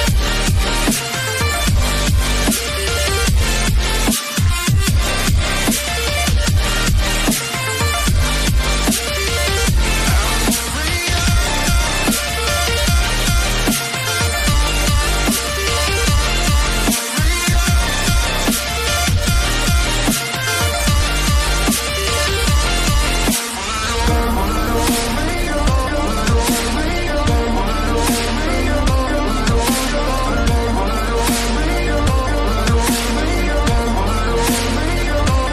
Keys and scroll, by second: 32.4 Left, 32.4 ctrl+z.